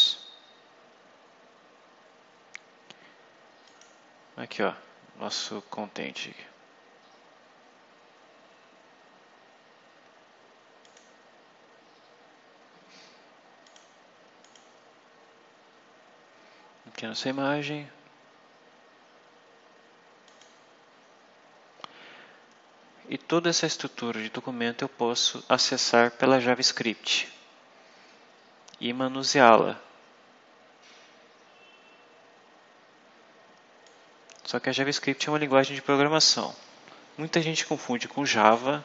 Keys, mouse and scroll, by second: 3.5 click, 8.3 scroll down 2, 9.5 scroll down 2, 10.7 click, 13.5 click, 14.3 click, 20.1 click, 22.7-23.0 scroll up 1, 24.2 scroll up 1, 24.9-25.2 scroll down 1, 33.7-35.6 drag.